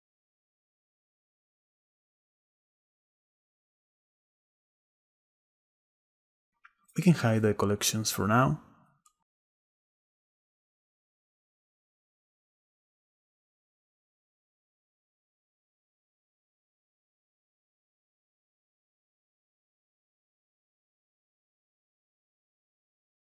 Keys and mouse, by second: 0.0 drag, 0.6 m, 1.9 Return, 4.2 click, 8.0 click, 8.6 click, 9.2 click, 10.0 click, 12.2-12.5 shift+middle drag, 13.6 middle click, 15.2 drag, 15.4 s, 17.6 ctrl+a, 18.9 click, 20.9 click, 21.6 m, 22.5 e, 22.7 Return.